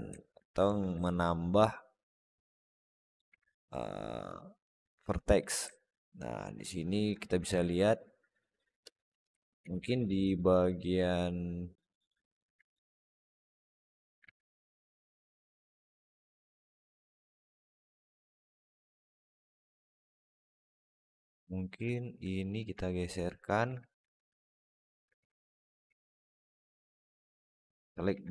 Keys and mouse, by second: 0.0 alt+middle click, 0.5 Tab, 0.9 alt+z, 1.2-3.0 alt+middle drag, 3.1 alt+z, 3.3-5.2 alt+middle drag, 5.6-6.9 alt+middle drag, 7.2 Tab, 7.5-8.8 alt+middle drag, 8.9 Tab, 9.3 alt+middle click, 9.4 alt+z, 9.8 alt+middle click, 10.2 shift+middle click, 10.5-12.2 alt+middle drag, 12.5 click, 13.1 click, 14.1 alt+z, 14.3-15.5 alt+middle drag, 15.8 alt+z, 16.2 middle click, 17.7 middle click, 18.6 alt+z, 18.8-20.2 alt+middle drag, 20.7 click, 21.8 alt+shift+middle click, 22.3 shift+click, 22.7 alt+middle click, 23.3 click, 23.5 alt+z, 25.0 alt+z, 25.7 alt+z, 26.6 shift+click, 27.0 alt+z, 27.2 alt+middle click, 27.9 alt+z.